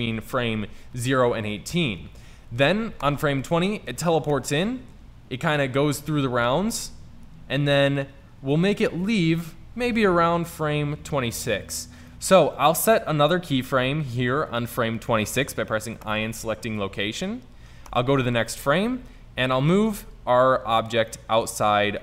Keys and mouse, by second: 0.1-1.0 Left, 1.0-1.9 Right, 2.1 Right, 2.3 Right, 2.6 Right, 3.0 Right, 4.4-5.5 Right, 5.7-6.8 Left, 7.2 Left, 7.5 Right, 7.7 Right, 7.9 Right, 8.1 Right, 8.3 Right, 8.5 Right, 8.7 Right, 8.9 Right, 9.1 Left, 9.4 Left, 10.0 Right, 14.8 i, 18.0 Right, 21.2 middle drag.